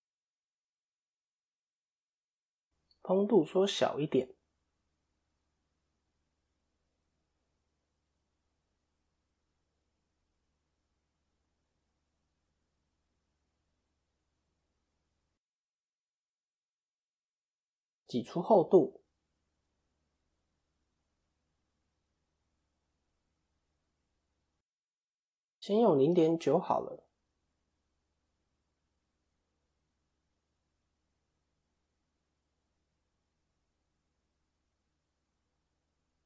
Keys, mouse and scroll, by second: 0.6 o, 1.7 click, 10.2 click, 10.9 KP_3, 11.6 KP_7, 12.4 KP_1, 14.1 click, 15.3 scroll down 1, 16.7 a, 17.5 alt+e, 23.9 click, 27.7 click, 28.8-29.3 scroll up 1, 29.4 KP_3, 30.1 KP_1, 31.0 a, 31.6 shift+middle click, 32.5 click, 34.7 KP_7.